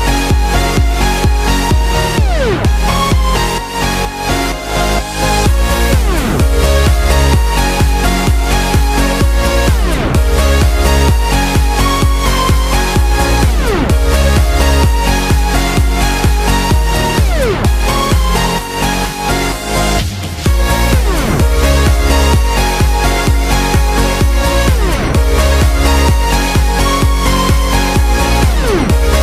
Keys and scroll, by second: 1.0 x, 7.4 x, 9.8 x, 23.0-23.8 typing, 28.4 super+z.